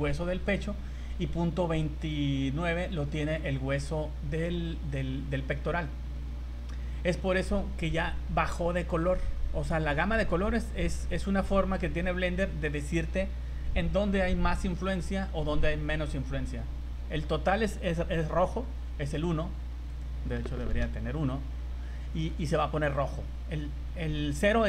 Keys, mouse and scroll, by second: 5.0 scroll down 2, 6.0 scroll up 2, 18.2 right click, 19.9 click, 21.5-22.0 scroll down 4, 22.0 shift+middle click, 24.0 right click.